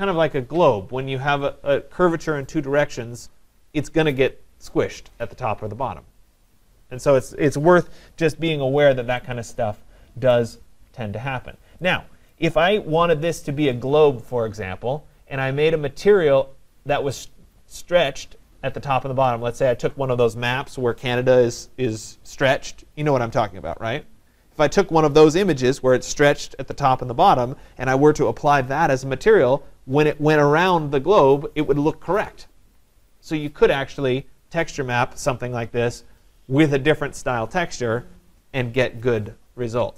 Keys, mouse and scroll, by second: 1.8 scroll, 8.6-9.6 scroll, 10.3 right click, 12.4 right click.